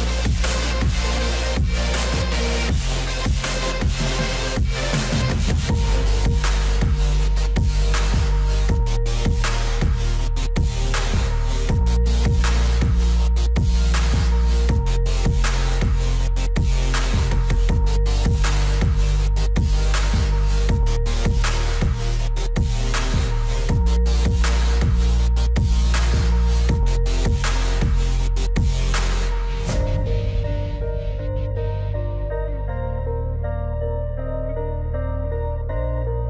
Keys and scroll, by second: 3.2 ctrl+z, 14.3 ctrl+z.